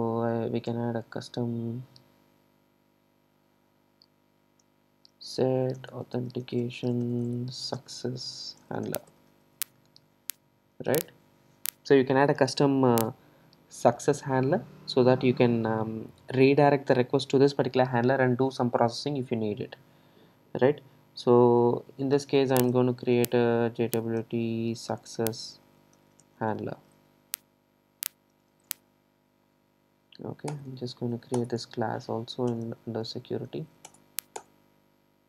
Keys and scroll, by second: 30.6 alt+Return.